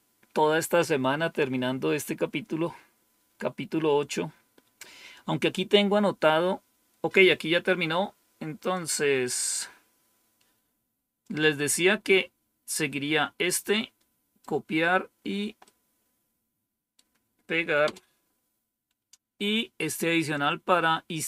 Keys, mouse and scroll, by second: 8.7 click, 11.1-12.7 drag, 13.4 right click, 15.6-16.9 right drag, 17.8 Return, 20.3-21.2 drag.